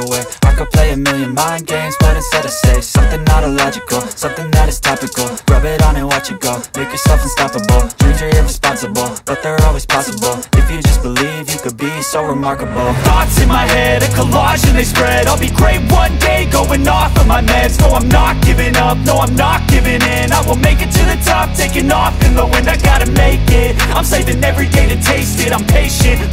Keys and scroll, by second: 0.4 v, 23.4 space, 25.0 z, 26.2 b.